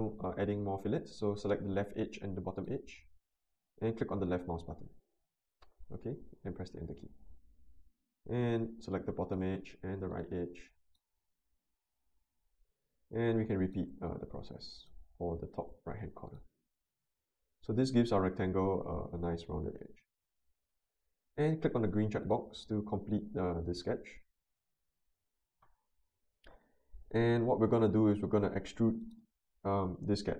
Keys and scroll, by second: 6.7 Return, 12.1 Return, 17.1 Return.